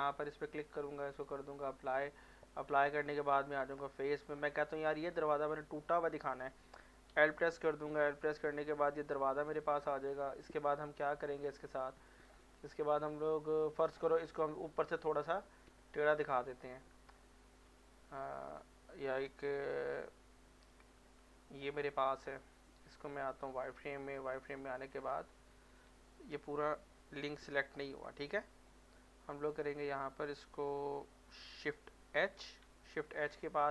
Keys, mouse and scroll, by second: 1.1 click, 2.3 middle click, 2.8 Tab, 3.8 middle click, 4.6 click, 7.6 scroll down 1, 7.9 middle click, 8.9 click, 9.8 middle click, 11.9 click, 12.5 middle click, 13.9-18.1 typing, 20.7 Tab, 21.8 middle click, 22.9 z, 23.5 z, 23.7-25.0 middle drag, 25.2 ctrl+z, 27.5 l, 28.7-32.0 drag, 32.0 shift+Num_Lock, 32.0 click, 32.1 shift+h, 32.7 middle click, 33.4 shift+middle click.